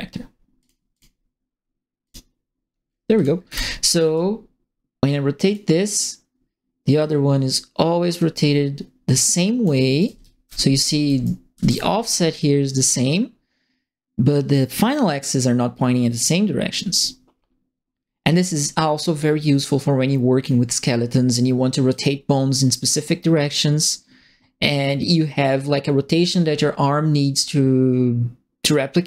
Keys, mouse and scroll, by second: 0.5 click, 0.9 click, 2.0 click, 3.1 click, 3.4 e, 4.1-5.5 drag, 6.9-9.6 drag, 9.7-11.5 typing, 9.9 right click, 11.2 right click, 12.7-20.4 drag, 21.9-26.2 drag.